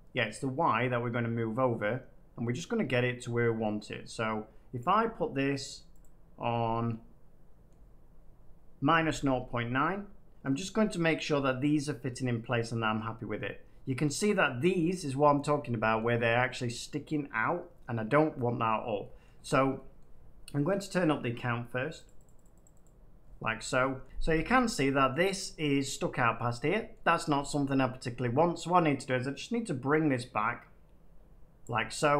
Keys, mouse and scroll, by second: 4.7 click, 5.9-6.9 drag, 7.6 middle click, 8.5 middle click, 10.4 middle click, 12.9 middle click, 15.9-16.9 middle drag, 17.4 middle click, 18.2 middle click, 18.6-20.8 middle drag, 22.0-23.5 drag, 23.5 middle click, 24.5-26.8 middle drag, 26.9 middle click, 31.6 click.